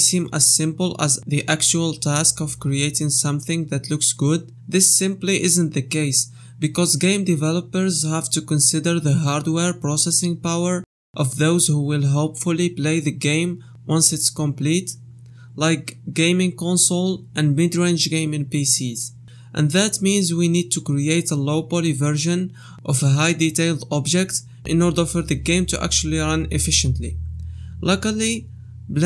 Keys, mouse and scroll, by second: 0.0 middle click, 0.2 l, 0.4 middle click, 0.4 scroll up 1, 0.8 scroll down 1, 1.0 middle click, 1.0 scroll down 3, 1.2 middle click, 1.4 scroll up 1, 1.5 middle click, 1.7 l, 1.8 l, 2.0 ctrl+z, 2.1 middle click, 2.5 l, 2.6 x, 3.0 middle click, 3.0 scroll down 8, 4.4 middle click, 4.7-5.1 scroll up 2, 4.9 middle click, 5.2 click, 5.4 middle click, 6.7 middle click, 6.9 scroll up 1, 7.2 middle click, 7.6 scroll down 1, 8.6 click, 9.0 click, 9.4 scroll up 1, 9.6 middle click, 9.9 middle click, 10.2 middle click, 13.1 click, 18.3-19.7 scroll up 1, 21.4 click, 21.9 click, 22.1 click, 22.4 ctrl+a, 22.8 click, 23.0 click, 23.2 ctrl+a, 23.8 scroll down 1, 24.5 middle click, 24.9 scroll up 1, 26.3 click, 26.6 click, 26.9 Tab, 29.0 Tab.